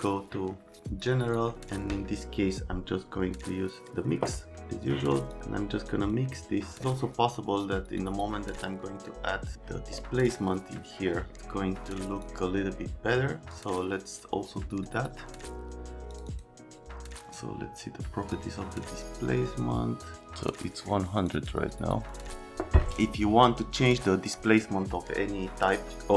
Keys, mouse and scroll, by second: 4.8 click, 5.9 click, 7.4 click, 8.9 right click, 13.5 middle click, 17.3-18.3 drag, 21.2 click, 21.3 click, 22.0 click.